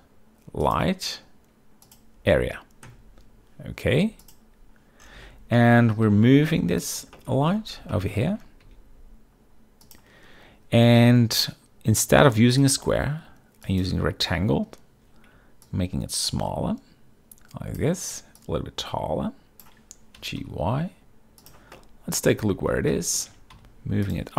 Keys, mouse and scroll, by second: 4.3 click, 6.2 g, 7.3 shift+middle drag, 8.0 shift+middle drag, 8.7 g, 9.9 click, 12.7-14.0 drag, 15.8-18.0 shift+drag, 18.5-19.7 shift+drag, 20.3 g, 20.5 y, 21.8-22.4 middle drag, 22.5-24.3 typing, 23.0 drag, 24.2 click.